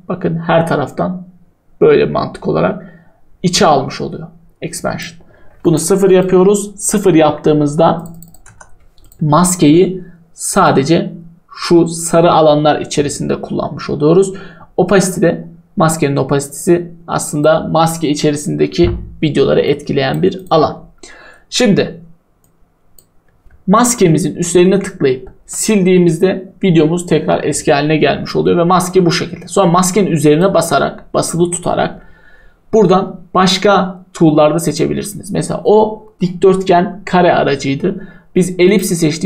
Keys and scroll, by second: 8.5 0, 25.4 Delete.